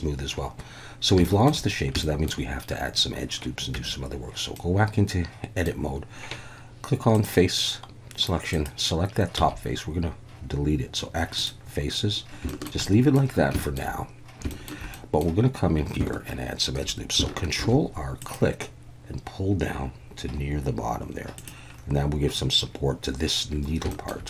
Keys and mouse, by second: 1.2 shift+middle click, 2.0 shift+middle click, 3.7 Tab, 4.5-5.6 middle drag, 7.1 click, 9.4 x, 12.5 shift+middle click, 12.8 middle click, 13.6 shift+middle click, 14.5 shift+middle click, 14.9 middle click, 17.6 ctrl+r, 21.3 click, 24.0 shift+middle click.